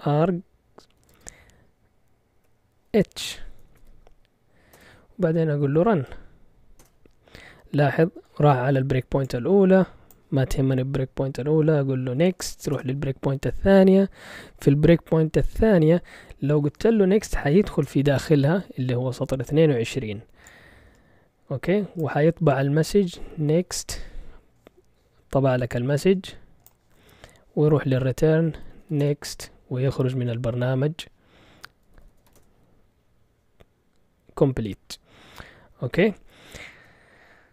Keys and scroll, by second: 0.0-1.1 typing, 2.3-4.3 typing, 4.7 Return, 5.4-7.3 typing, 11.9-13.1 typing, 16.2-17.8 typing, 22.9-24.1 typing, 28.2-29.4 typing, 31.6-32.7 typing, 36.7 Return.